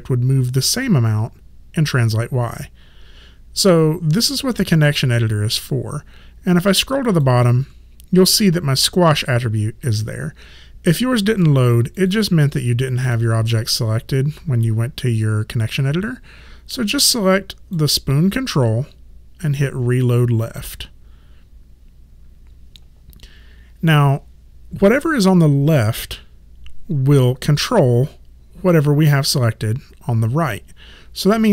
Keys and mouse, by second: 4.5 click, 12.0 click, 17.0 click, 20.6 click.